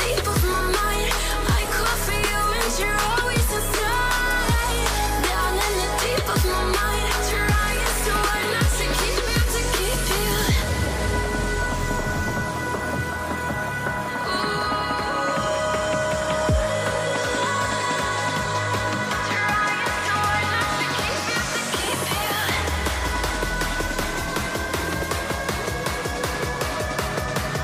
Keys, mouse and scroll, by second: 1.1 shift+click, 1.6 Return, 3.2 Down, 3.5 Up, 5.4 double click, 5.8-6.6 typing, 6.2 Tab, 7.1 Return, 7.8 typing, 17.4 Return, 22.1-22.6 alt+scroll up 1, 23.0 alt+scroll up 1, 23.8 ctrl+t.